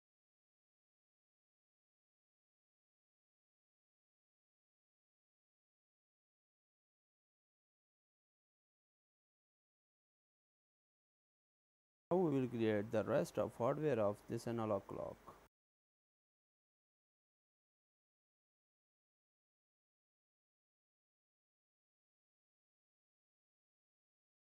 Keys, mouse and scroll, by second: 0.1 Tab, 0.3 BackSpace, 0.4 1, 0.5 Tab, 1.0 shift+d, 1.5 click, 1.7 click, 2.6 click, 2.9 Tab, 3.1 BackSpace, 3.2 2, 3.2 Return, 3.5 BackSpace, 3.7 Tab, 4.2 click, 4.2 scroll down 9, 4.4 shift+middle click, 4.9 click, 5.3 click, 5.6 click, 5.8-6.6 scroll up 6, 6.0 shift+middle click, 6.6 click, 7.1 click, 7.5 click, 7.8 click, 8.3 shift+click, 9.0 shift+click, 9.4 shift+click, 9.4 g, 10.4 right click, 13.3 right click, 16.4 click, 16.5 click, 23.8 shift+a.